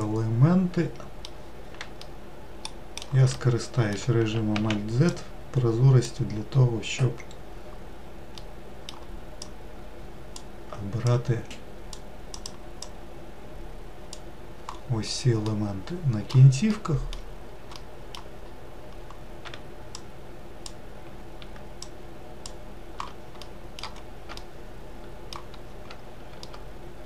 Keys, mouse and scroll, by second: 4.3 alt+z, 5.8 click, 8.1-10.1 middle drag, 10.1 click, 11.7 click, 15.2-18.2 middle drag, 18.2-19.0 scroll up 1, 20.4 shift+click, 22.2 shift+click, 23.1-27.0 middle drag.